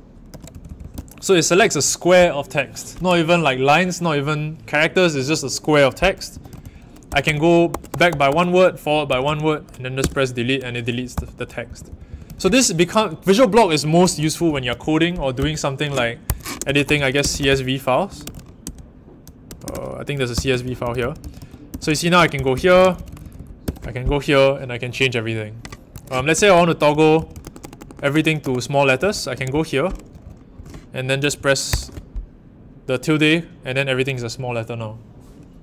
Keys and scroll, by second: 0.2-2.0 typing, 6.0-12.7 typing, 13.9 ctrl+v, 14.0-24.1 typing, 25.8-31.6 typing.